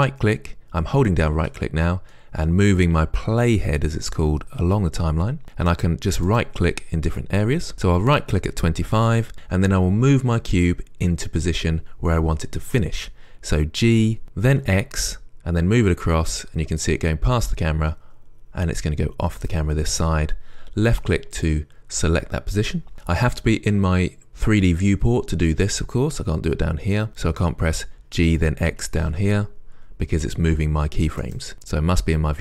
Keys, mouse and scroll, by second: 6.5-14.1 right drag, 14.1 g, 28.5 g.